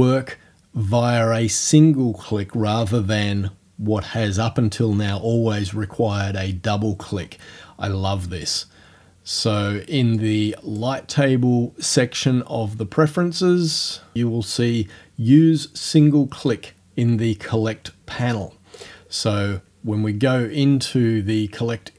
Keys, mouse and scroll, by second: 10.2 click, 18.8 click.